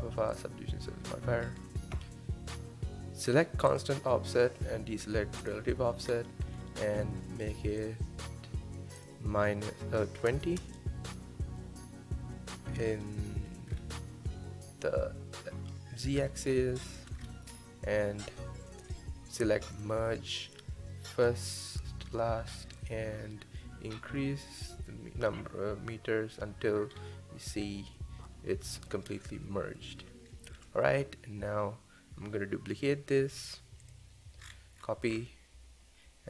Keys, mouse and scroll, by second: 0.0-0.3 scroll down 1, 0.3 click, 1.4 scroll up 1, 3.7 click, 5.5 click, 6.1-6.6 scroll down 1, 6.6-7.8 shift+middle drag, 7.8-12.5 drag, 12.5-13.0 scroll up 1, 13.0-13.7 shift+middle drag, 13.7-14.3 scroll down 3, 14.3-16.1 middle drag, 16.1-16.8 scroll up 3, 16.8-17.2 shift+middle drag, 17.2-17.6 scroll up 2, 17.6-19.8 middle drag, 19.8 click, 21.3 click, 22.8-25.8 drag, 26.9-27.7 scroll up 2, 27.7-29.1 middle drag, 29.1-29.5 scroll down 1, 29.5-33.3 middle drag, 33.8 click, 34.4-35.2 scroll down 10.